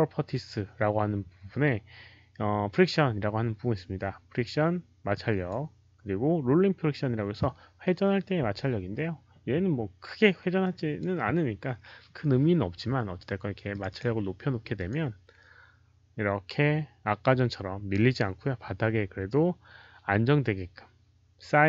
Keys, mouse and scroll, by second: 5.0 click, 10.5 click, 13.6 click, 13.8 click, 14.7 click, 16.3 click.